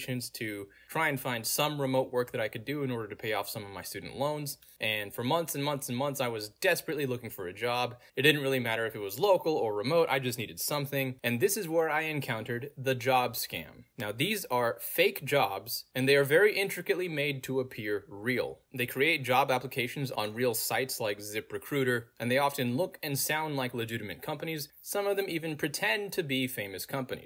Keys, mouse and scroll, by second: 1.5 click, 7.6 click, 8.2 scroll down 2, 8.8 click, 10.0-10.3 scroll down 2, 11.3 click, 14.2 click, 17.6 click, 18.5 middle click, 18.5-19.1 scroll down 2, 20.0 click, 21.5 click, 22.6 middle click, 22.6-23.0 scroll down 2, 23.4 click, 24.2 middle click, 24.2-24.9 scroll down 2, 25.3 click, 27.1 click.